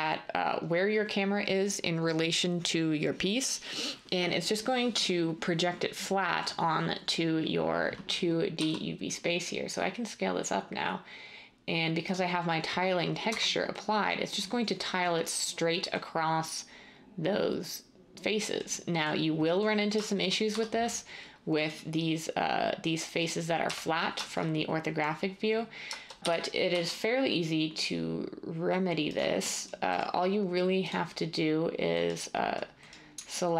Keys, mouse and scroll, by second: 8.6 s, 13.2 Tab, 20.5 Tab, 23.6 1, 26.2-26.7 typing.